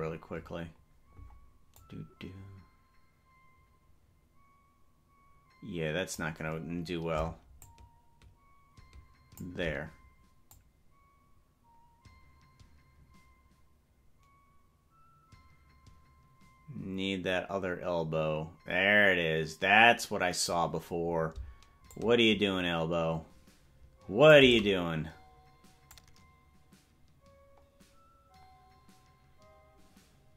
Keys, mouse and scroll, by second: 0.1 scroll down 6, 0.5 scroll down 1, 1.3 scroll down 2, 1.9-6.4 drag, 7.6-9.5 shift+drag, 10.6-20.7 drag, 22.0-24.5 shift+drag, 26.1-30.3 drag.